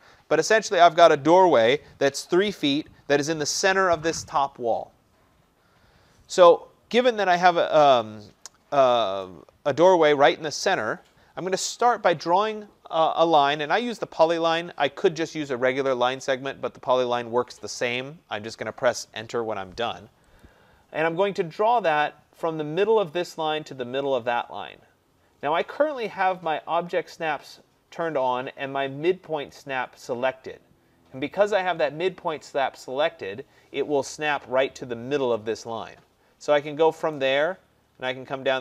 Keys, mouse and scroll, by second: 6.4 click, 20.4 click, 37.2 click.